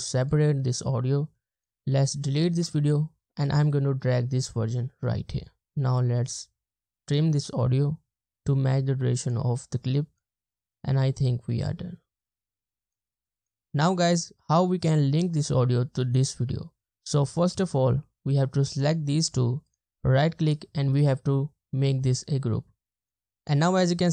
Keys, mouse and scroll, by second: 2.6 BackSpace, 5.7 space, 10.4 space, 19.7 right click, 23.4 ctrl+z, 23.9 double click.